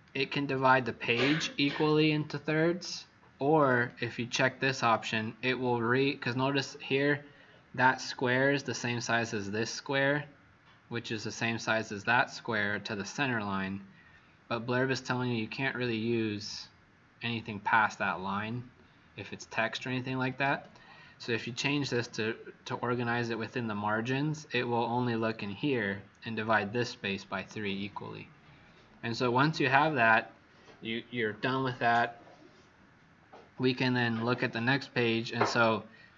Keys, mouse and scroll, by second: 34.9-35.9 scroll down 10.